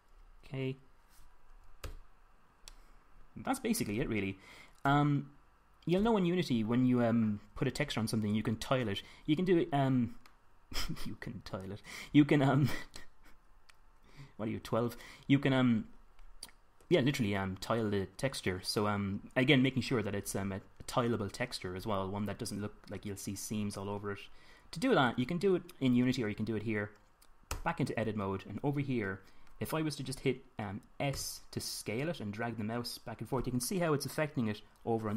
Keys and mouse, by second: 2.4 Tab, 3.2-3.9 middle drag, 5.4 KP_7, 6.5 KP_5, 28.1 Tab, 31.7 s.